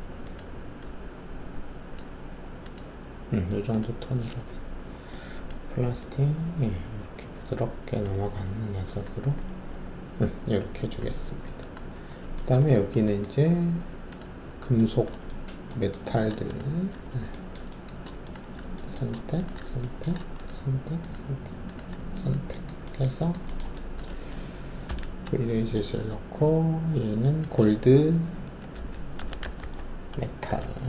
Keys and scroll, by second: 24.8 alt+shift+v, 28.7-30.8 typing.